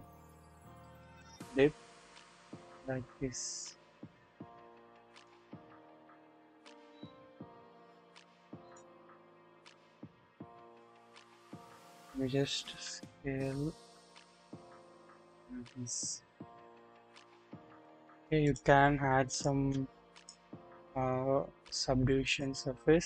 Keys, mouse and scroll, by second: 1.2-5.2 drag, 7.5 click, 8.6 click, 9.0-9.6 scroll down 1, 9.6-10.8 drag, 11.0-11.3 scroll up 1, 11.5 drag, 12.7 s, 15.6 scroll down 1, 16.4-17.9 drag, 19.4 click, 20.1-22.4 drag.